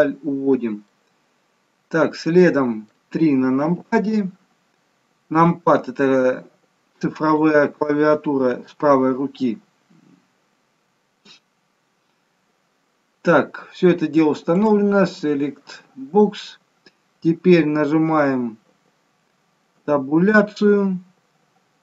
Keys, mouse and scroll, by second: 0.8 middle click, 3.5 KP_3, 5.4 click, 14.4 click, 19.7 Tab.